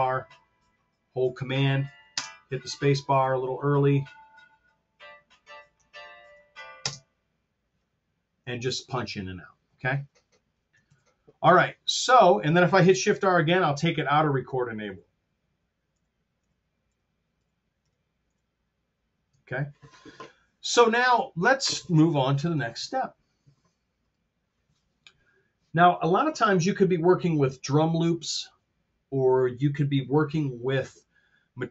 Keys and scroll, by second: 2.2 super+space, 6.8 space, 10.8 super+z, 14.8 shift+r, 15.8 shift+r, 22.7 super+Tab.